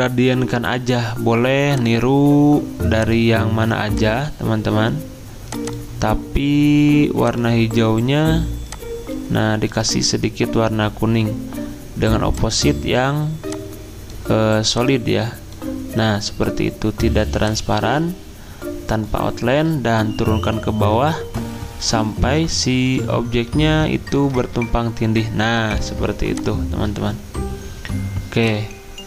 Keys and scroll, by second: 20.0 ctrl+Page_Down, 20.5 ctrl+Page_Down, 22.8 ctrl+Page_Up, 23.2 ctrl+Page_Up.